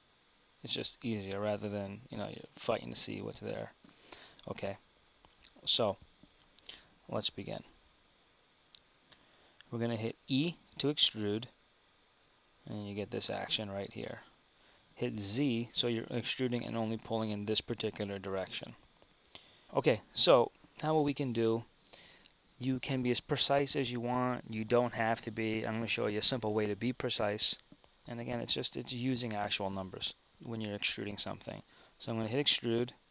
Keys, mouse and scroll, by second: 1.5 z, 2.3 z, 3.3 z, 3.6 z, 6.4 KP_1, 10.2 e, 32.5 e.